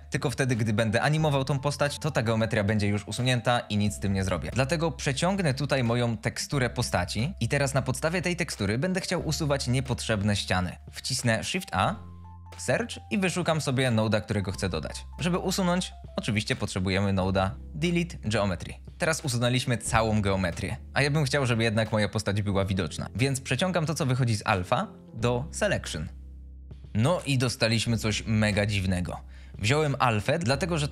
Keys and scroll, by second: 0.6 ctrl+z, 11.7 shift+a, 16.1 d, 16.4 l, 16.4 e, 17.5 Return.